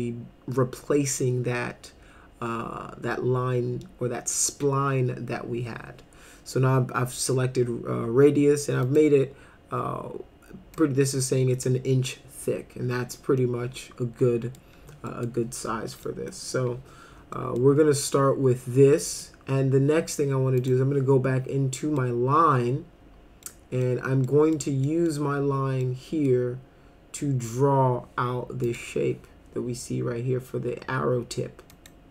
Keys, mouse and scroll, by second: 8.8 click, 10.8 click, 13.4-14.6 middle drag, 15.1 middle click, 16.1 middle click, 17.3 middle click, 18.9 middle click, 20.6 click, 21.8 middle click, 23.5 middle click, 24.3 middle click, 24.9 middle click, 25.8 middle click, 28.6 click, 31.7 click.